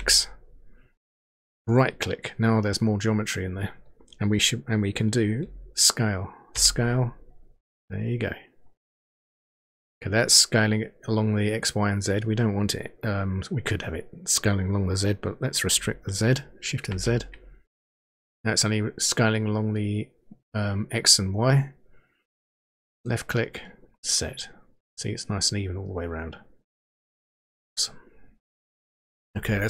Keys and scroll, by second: 6.6 s, 16.8 shift+z.